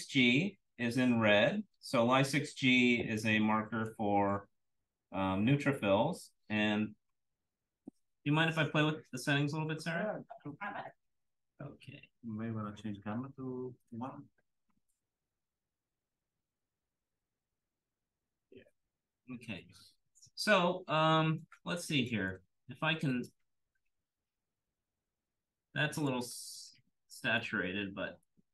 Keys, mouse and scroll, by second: 0.9-3.1 scroll up 1, 3.1 scroll up 1, 3.2-3.8 drag, 5.8 click, 6.4 click, 15.4-17.8 drag, 19.2-20.0 scroll down 1, 20.0-20.6 scroll down 1, 20.6-22.0 scroll up 1, 22.0 click, 23.9 click, 25.9 click, 26.5-26.8 scroll down 1, 26.8-27.3 drag, 27.6-28.1 scroll up 1, 28.1-28.5 scroll up 1, 28.2 click.